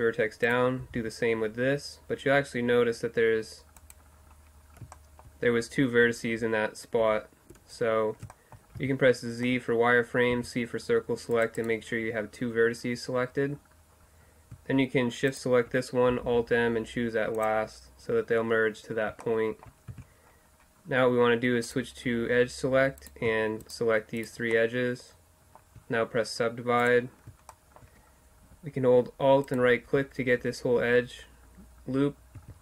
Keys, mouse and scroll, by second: 0.8 g, 4.2-7.0 middle drag, 7.0 ctrl+z, 8.8 z, 10.4 c, 11.7-13.6 right drag, 15.3-17.2 right drag, 16.2 alt+m, 18.6-20.3 middle drag, 19.9 z, 20.4 middle click, 21.7-23.0 drag, 23.0-24.6 middle drag, 24.6 right click, 24.9 middle click, 27.5-30.7 middle drag, 32.4 q.